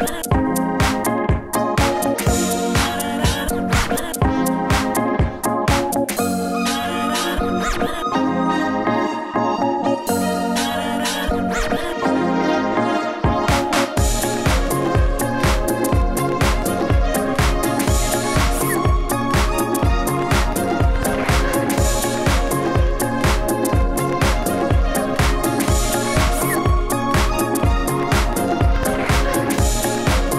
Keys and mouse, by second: 0.6 Tab, 1.0 alt+z, 1.2 alt+z, 2.3 right click, 2.7 e, 3.0 s, 3.6 g, 5.1 s, 6.0 Tab, 7.1 a, 8.3 alt+z, 8.7 alt+z, 9.0 ctrl+s, 9.4 KP_1, 9.6 KP_3, 9.9 KP_1, 11.7 shift+c, 12.4 Tab, 12.6 x, 15.1 e, 15.8 e, 17.0-19.0 typing, 19.5-20.7 drag, 20.2-22.2 typing, 21.6 ctrl+s, 23.2-25.8 typing, 27.1 KP_7, 27.5 KP_1, 28.0 right click, 28.4 e, 29.4 f, 29.5 a, 29.7 e, 30.3 shift+right click.